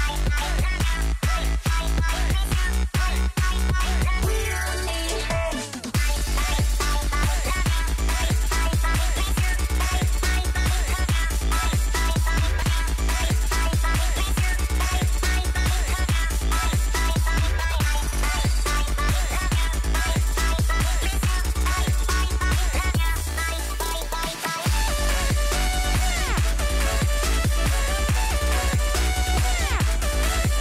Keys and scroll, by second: 15.6 space, 17.6 space, 23.0 s.